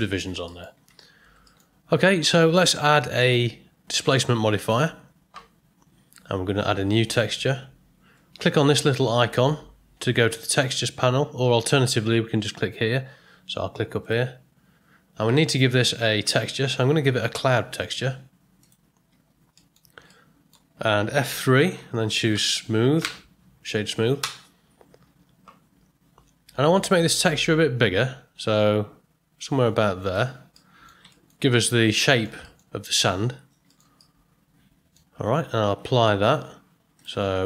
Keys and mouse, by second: 0.4 middle click, 0.8 Tab, 1.4 ctrl+middle click, 3.3-4.6 drag, 7.0 click, 14.0 click, 15.6-18.7 drag, 19.5 middle click, 20.1-20.5 ctrl+middle drag, 21.4 F3, 22.6 o, 27.8-30.1 drag, 30.5-30.8 middle drag, 31.1 ctrl+middle click, 31.5-31.8 middle drag, 32.1 ctrl+middle click, 32.4 shift+middle drag, 33.7 ctrl+middle click, 33.9-34.9 middle drag.